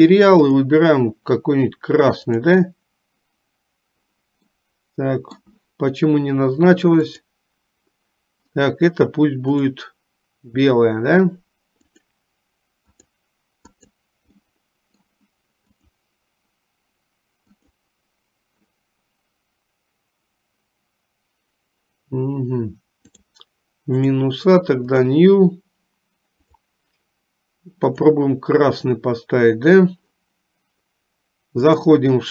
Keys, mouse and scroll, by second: 0.9-2.8 drag, 4.9 middle click, 7.1 click, 12.1 click, 13.1 click, 14.0 click, 14.6 middle click, 16.1 click, 24.9 click.